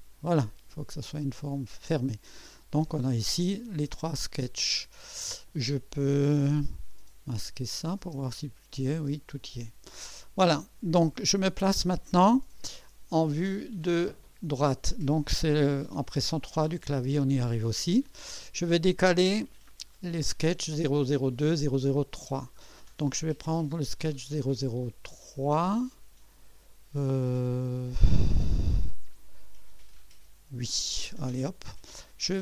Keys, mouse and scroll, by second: 1.2 click, 7.6 click, 8.0 space, 8.9 space, 8.9 space, 12.8-13.6 drag, 14.4 click, 15.7-16.4 typing, 16.7 right click, 30.6 click.